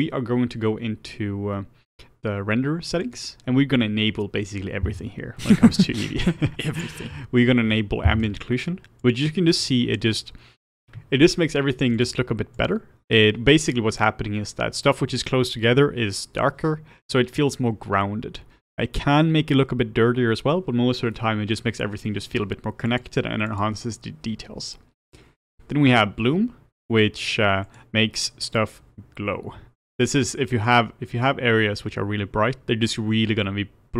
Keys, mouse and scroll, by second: 8.2 click, 9.5 click, 12.5 click, 22.8-26.8 drag, 27.6 click, 28.1-33.9 drag.